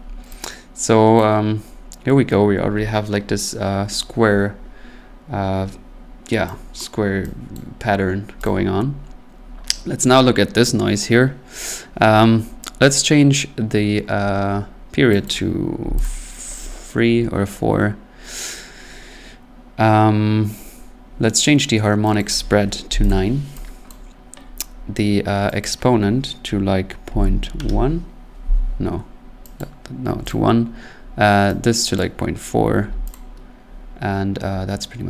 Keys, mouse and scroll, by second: 1.2 click, 5.0 middle click, 6.1-6.5 scroll, 6.8 click, 7.5 click, 8.1-8.4 scroll, 8.4 click, 15.2 click, 15.8 3, 16.0 click, 22.2 click, 22.9 9, 23.1 click, 23.9 click, 25.6 click, 27.1-27.4 typing, 27.5 Return, 29.6 click, 30.1 1, 30.3 click, 32.0 click, 32.8 4, 33.1 click.